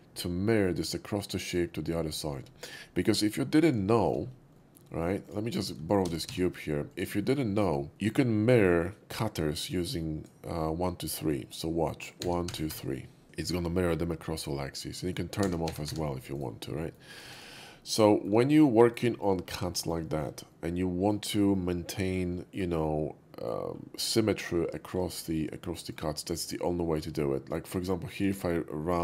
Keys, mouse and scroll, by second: 1.4 click, 3.8 shift+middle click, 3.9 shift+middle click, 4.5 shift+middle drag, 4.9 shift+middle click, 5.2 shift+click, 5.8 shift+d, 6.3 x, 6.9 click, 7.2 shift+middle click, 8.0-8.6 shift+middle drag, 9.2-10.2 shift+drag, 12.3 1, 12.5 2, 12.7 3, 12.7 4, 15.5-17.2 typing, 16.3-16.8 right drag, 16.8 middle click, 17.1 click, 17.3 click, 17.6 middle click, 17.9 middle click, 18.1 shift+middle click, 18.8 shift+middle click, 19.1 shift+middle click, 19.8 shift+middle click, 20.1 shift+middle click, 20.4-21.1 shift+middle drag, 21.3 shift+middle click, 21.5-23.6 shift+middle drag, 24.5-25.1 middle drag, 25.3-26.4 middle drag, 26.4 shift+click, 27.7-28.2 drag, 28.3 right click, 28.9-29.0 drag.